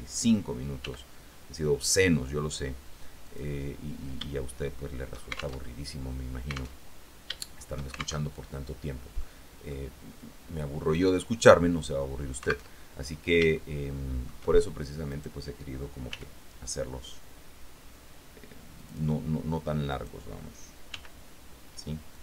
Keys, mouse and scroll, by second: 1.0 g, 3.5 click, 4.5 shift+click, 5.8 alt+shift+Tab, 7.0 alt+Tab, 8.4 alt+shift+Tab, 9.4 click, 10.4 click, 13.7 shift+click, 15.3 right click, 16.3 g, 18.9 click, 20.1 right click, 21.1 g.